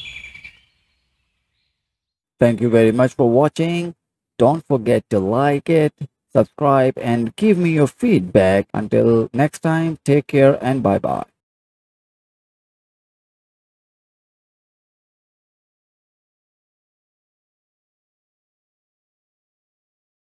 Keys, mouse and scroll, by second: 0.0-1.8 drag, 1.8-9.5 alt+middle drag.